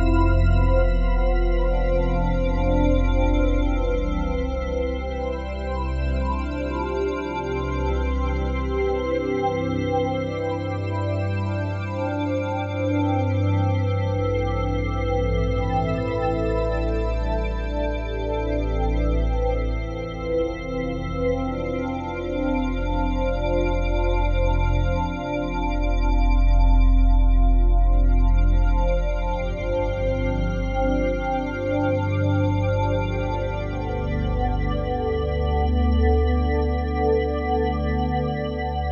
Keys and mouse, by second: 0.6 click, 1.0 click, 1.8 typing, 2.8 click, 3.7 typing, 3.9 ctrl+click, 4.8 typing, 6.6-9.6 drag, 9.6-10.0 typing, 10.9-15.7 drag, 13.2-13.9 typing, 15.1-16.6 typing, 18.0-21.1 drag, 21.1 r, 21.6 x, 23.1 click, 23.5 click, 24.3 r, 24.7 y, 25.8 click, 26.5 r, 27.0 z, 28.5-35.6 drag, 35.1-36.6 typing, 36.8 click, 37.9-38.9 alt+drag, 38.6-38.9 typing.